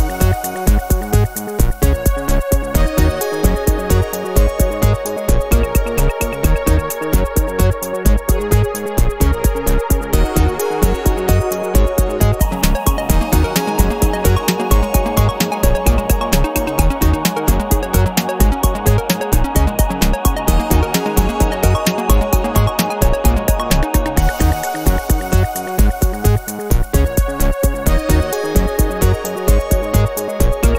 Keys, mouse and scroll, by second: 0.8 click, 1.6 click, 3.6 click, 4.4-5.9 middle drag, 6.6-16.8 drag, 16.9 click, 17.7 click, 18.5-20.4 middle drag, 21.2 click, 22.0 click, 23.4-27.1 drag, 27.1-28.7 middle drag, 29.4 click, 29.8 click, 30.2-30.7 middle drag.